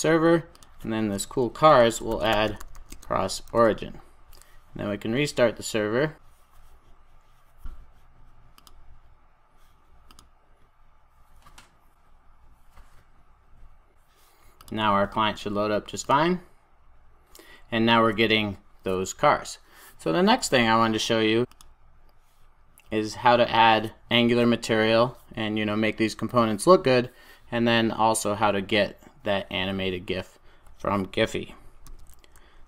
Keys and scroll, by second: 3.0 Return, 4.5 super+s, 8.8 ctrl+r.